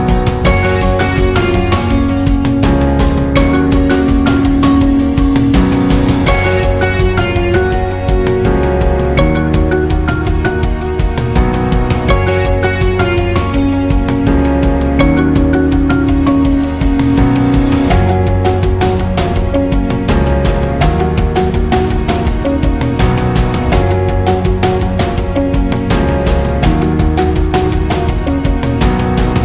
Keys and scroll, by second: 8.1 ctrl+alt+shift+j, 14.0 ctrl+alt+shift+j.